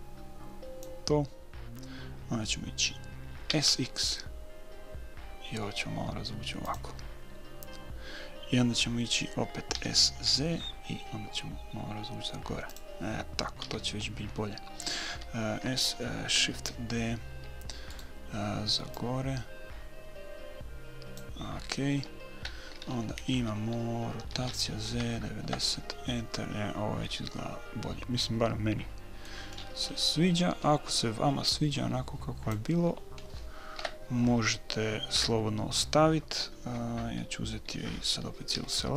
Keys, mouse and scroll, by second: 3.9 s, 10.1 s, 14.0 a, 15.5 a, 17.0 shift+d, 19.3-21.2 drag, 24.7 r, 27.4-29.3 middle drag, 29.3 click, 29.9-31.9 middle drag, 31.9-33.3 drag, 33.7 click, 33.8 middle click, 34.1 KP_3, 35.5 KP_1, 38.9 a.